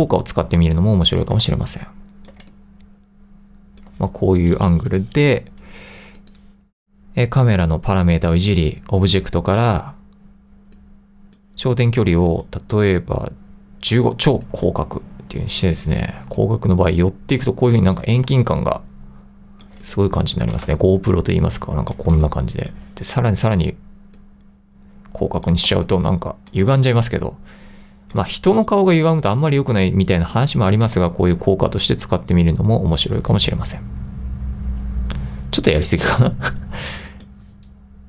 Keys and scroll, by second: 0.7-2.4 typing, 16.2 2, 18.3 3, 19.9 2, 20.8 1, 22.3 2, 25.8 2, 26.7 1, 28.4 2, 31.1 3, 33.5-34.2 typing.